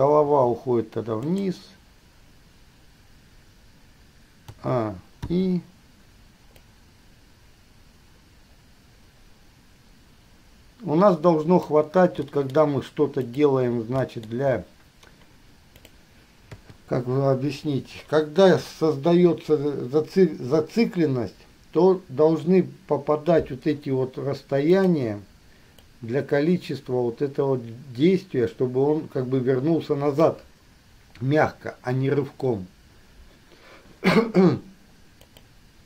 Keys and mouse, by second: 0.0 click, 0.5 r, 4.7 a, 5.4 i, 6.9-11.9 drag, 12.4 middle click, 12.6-13.7 drag, 14.2 click, 16.0 click, 16.7 KP_3, 24.9 click, 26.2-30.5 drag, 35.4 click.